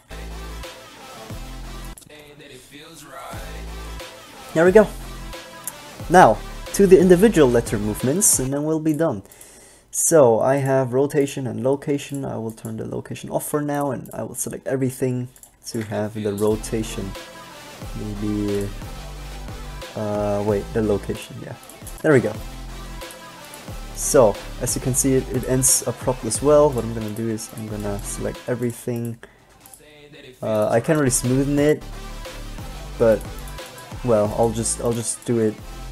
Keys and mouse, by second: 0.2 alt+a, 7.4-8.6 drag, 8.6 alt+a, 16.1 alt+a, 23.3 middle click, 25.9-29.3 typing, 33.9 b, 34.3 g, 35.3 b, 35.7 g.